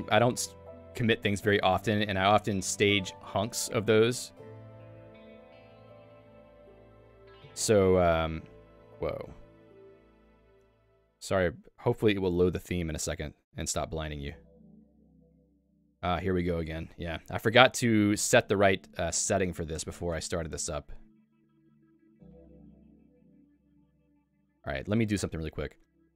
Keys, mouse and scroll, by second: 23.9 super+f.